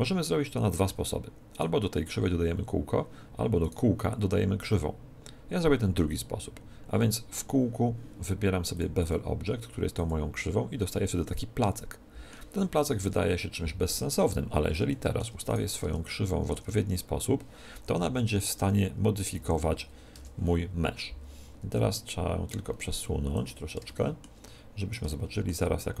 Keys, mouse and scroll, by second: 1.4-3.4 right drag, 3.5-5.5 right drag, 8.7-10.7 drag, 11.1-13.0 middle drag, 13.0 KP_1, 14.2-14.8 scroll up 1, 14.8 middle click, 15.4-17.0 right drag, 15.7 Tab, 16.4 Tab, 18.2 r, 22.4-24.2 drag, 23.8-26.0 middle drag, 24.0 right click.